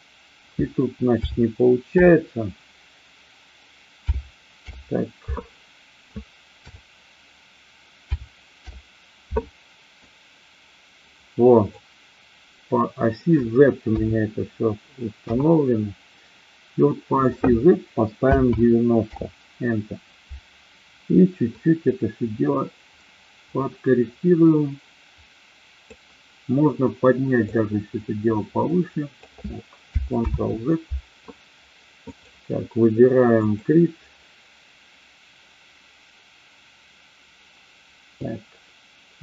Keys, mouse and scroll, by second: 3.9 KP_0, 4.6 Return, 9.9-11.7 drag, 13.8 KP_3, 15.2 KP_1, 17.1-20.4 drag, 21.4-25.9 drag, 27.4-29.2 drag, 30.3 ctrl+z, 31.9-32.9 drag, 33.3 click, 38.2-39.2 drag.